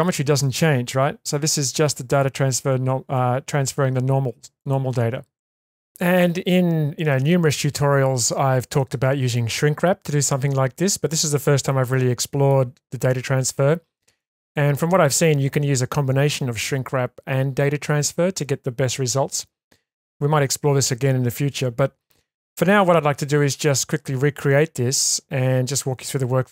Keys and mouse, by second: 1.5 click, 4.6 click, 6.1-7.1 middle drag, 10.9 middle click, 11.7-12.5 shift+middle drag, 14.2-15.0 shift+middle drag.